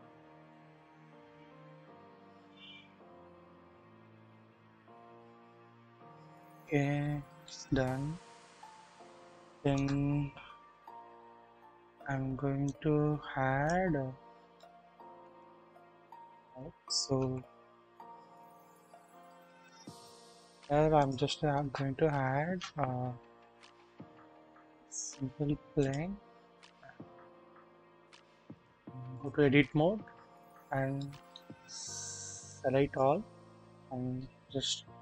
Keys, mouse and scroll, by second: 1.9-2.8 shift+middle drag, 2.9 scroll up 1, 3.5-4.6 scroll down 1, 5.0 ctrl+s, 5.1 ctrl+s, 7.4-9.8 shift+middle drag, 12.7-13.7 drag, 13.7 scroll up 1, 14.0 scroll down 1, 14.6-15.3 shift+middle drag, 16.2-17.2 scroll down 1, 17.2 KP_1, 17.2 KP_1, 17.8 scroll down 1, 19.4 KP_1, 21.0 middle click, 21.0 scroll up 1, 21.3 scroll, 21.3 typing, 28.5-29.3 drag, 29.5-29.8 scroll up 1, 30.7 scroll down 1, 31.0 shift+middle click, 31.5-31.8 shift+scroll up 1, 32.5 click, 32.5-33.0 scroll up 1, 34.1 typing.